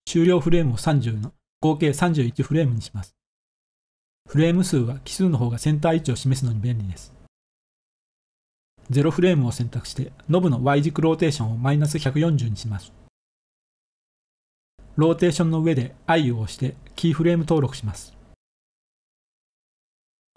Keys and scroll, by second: 0.2-0.5 typing, 0.9 Return, 3.5-4.2 typing, 8.5-10.0 typing, 14.6 i.